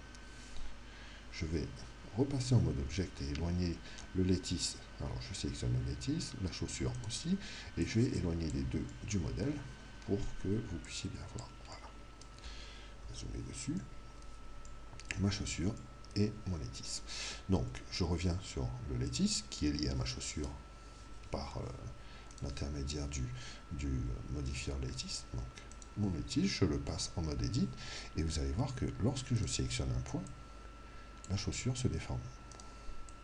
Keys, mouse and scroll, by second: 2.8 Tab, 7.0 right click, 7.8 click, 9.4-10.8 middle drag, 10.9 click, 11.8-13.4 middle drag, 13.0 KP_Decimal, 13.7-17.5 middle drag, 19.0 right click, 22.3 right click, 25.7 right click, 27.0 Tab, 29.4 right click, 30.3 click, 32.5 right click, 33.0-33.2 drag.